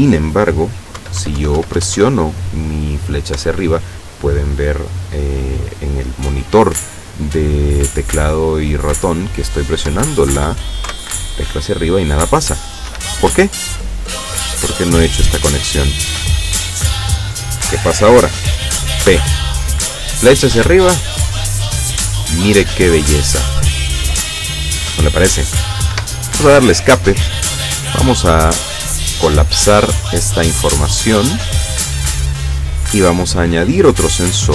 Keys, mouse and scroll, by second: 1.1 Up, 3.5 Up, 10.0 Up, 12.9 Escape, 15.2-16.9 drag, 19.1 p, 20.7 Up, 26.0 Escape, 28.0 click, 29.3 click, 31.0 click, 32.3 click, 33.8 click.